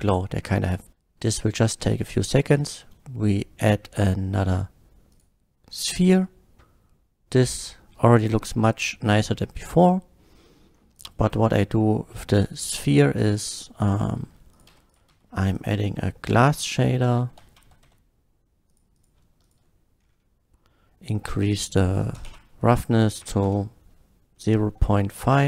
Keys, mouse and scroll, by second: 4.3 shift+a, 5.1 click, 6.6-7.8 middle drag, 8.1 middle drag, 8.8-9.9 middle drag, 10.9 click, 12.3 click, 12.9 middle click, 13.8 click, 14.6 click, 14.7 x, 14.9 click, 15.1 shift+a, 15.6 click, 16.3 g, 17.3 l, 17.6 a, 17.9 s, 18.6 click, 18.9 click, 19.5 click, 20.0-20.7 ctrl+shift+middle drag, 21.5 ctrl+shift+click, 22.2 KP_0, 22.3 KP_Decimal, 22.6 KP_0, 23.2 KP_5, 23.5 Return, 24.3-24.6 middle drag, 24.9 middle drag.